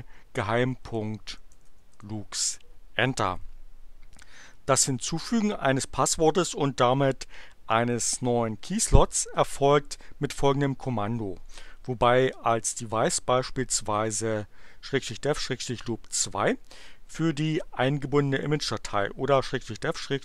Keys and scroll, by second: 0.0-2.1 typing.